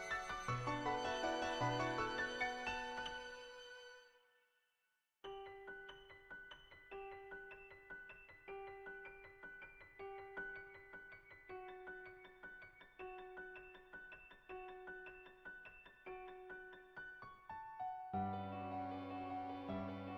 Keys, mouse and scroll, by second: 0.5 shift+middle click, 0.7 click, 1.0 Tab, 1.7 click, 1.9 click, 2.8 Tab, 3.5 click, 3.6 Tab, 4.9 shift+s, 5.6 Tab, 6.1 middle click, 7.2 click, 7.5 ctrl+z, 8.3 click, 8.6 click, 9.2 click, 9.7 click, 10.0 click, 10.4 click, 10.8 click, 11.6 click, 12.0 ctrl+z, 12.1 click, 12.4 click, 13.4 middle click, 13.8 shift+middle click, 14.5 shift+middle click, 14.9 shift+middle click, 16.2 shift+middle click, 17.2 middle click, 18.0-20.1 shift+middle drag.